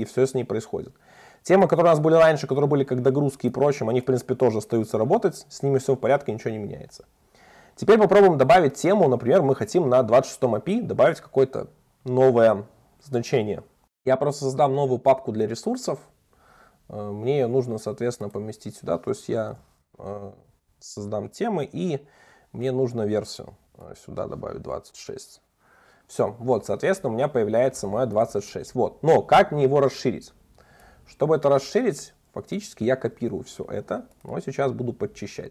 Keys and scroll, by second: 7.1 super+1, 26.7 super+1, 32.8 super+c, 33.2 super+1.